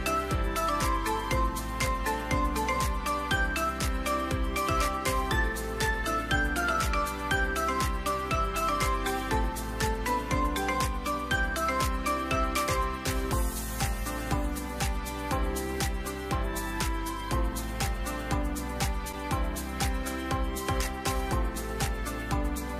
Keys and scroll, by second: 0.0-0.1 typing, 0.3 Return, 2.5-3.2 typing, 3.6 Return, 5.8-7.1 typing, 7.5 Return, 17.5 typing, 18.8-21.3 typing.